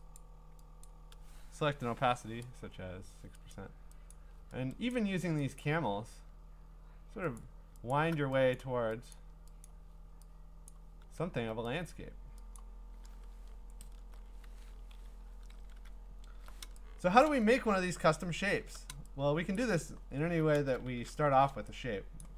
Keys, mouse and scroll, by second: 0.2 click, 0.8 click, 2.1 6, 3.5 click, 4.1 click, 4.9 click, 5.6 click, 7.4 alt+click, 7.9 alt+click, 8.6 click, 9.1 click, 9.7 click, 10.7 click, 11.9 click, 12.6 click, 13.3-14.0 scroll, 14.5 ctrl+a, 14.9 Delete, 15.5 ctrl+d, 15.9 scroll, 17.2 click, 17.7-18.6 scroll, 19.6 click, 20.1-20.8 scroll, 20.8-22.2 a, 22.2-22.3 click.